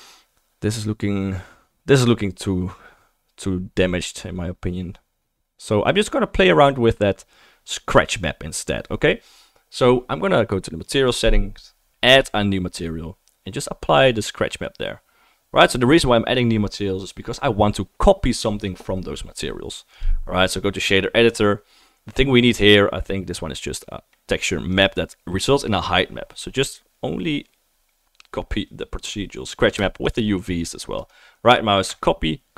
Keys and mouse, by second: 10.8-12.3 drag, 12.7-24.8 drag, 12.7-14.1 right drag, 12.9-14.1 middle drag, 14.1 typing, 24.8-30.1 right drag, 30.1-30.5 shift+drag, 30.5-31.9 right drag, 31.9 click, 32.0-32.5 right drag.